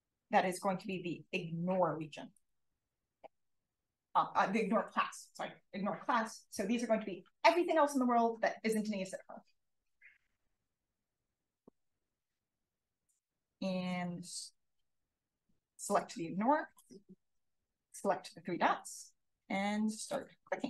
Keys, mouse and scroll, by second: 2.3 click, 15.7 click, 20.0 click.